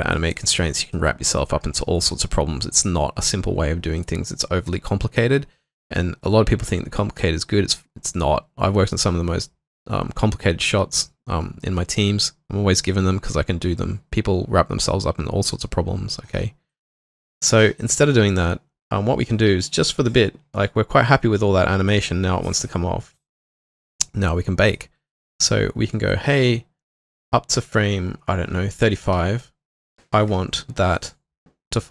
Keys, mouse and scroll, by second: 0.1 double click, 17.3 double click, 25.1 double click.